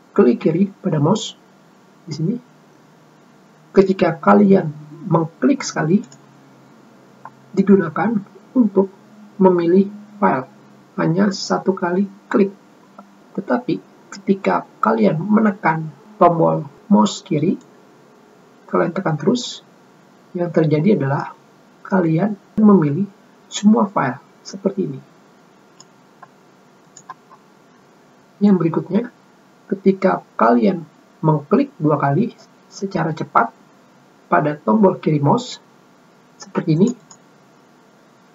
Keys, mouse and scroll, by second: 6.8 click, 11.1 click, 18.3-26.5 drag, 27.5 click, 28.0 scroll up 2, 37.5 click, 37.7 click.